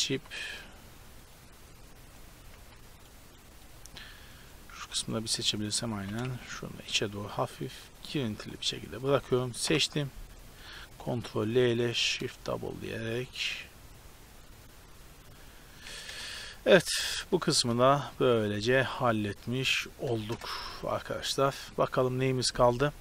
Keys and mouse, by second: 0.2 g, 2.6 z, 3.8 z, 4.8 z, 5.4 z, 6.0 g, 9.7 ctrl+l, 11.9 shift+d, 16.1 KP_0, 16.7 Tab, 17.9 a, 18.3 ctrl+s, 18.9 shift+space, 20.4 KP_0.